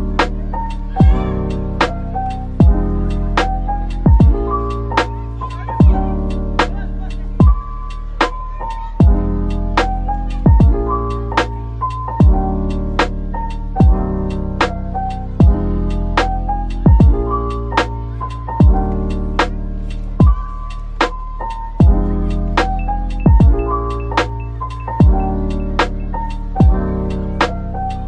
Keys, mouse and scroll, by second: 12.8-13.2 typing, 16.2-16.5 typing, 21.8 typing, 23.8 Tab, 24.5 typing, 25.2 shift+click, 26.1 shift+click, 26.4 ctrl+l.